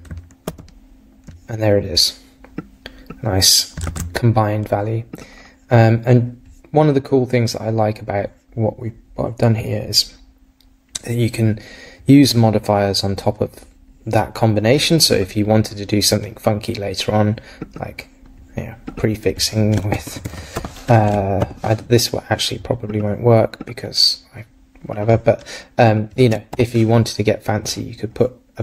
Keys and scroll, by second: 0.5 super+r, 3.9 super+Right.